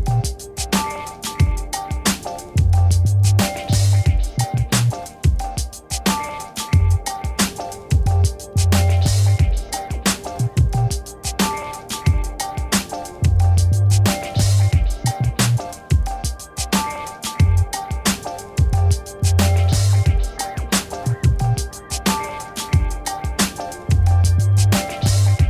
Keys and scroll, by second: 0.4 5, 2.2-3.9 typing, 4.9 Return, 6.9 2, 7.1 8, 8.0 [, 9.6 space, 10.6-12.2 typing, 13.2 Return, 15.0-19.2 typing, 20.5 Return, 25.2 Return.